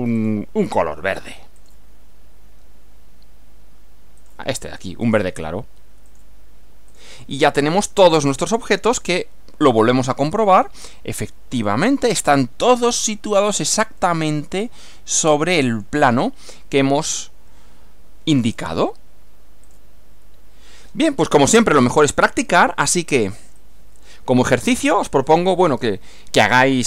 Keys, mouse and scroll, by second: 0.2 click, 1.6 click, 4.2 click, 5.0 click, 6.1 click, 6.9 click, 7.4-8.8 middle drag, 9.7 click, 10.4 click, 11.6 click, 14.0-15.1 middle drag, 16.2-17.3 middle drag, 18.4 click, 19.7 click, 21.8 click, 23.6-25.5 drag.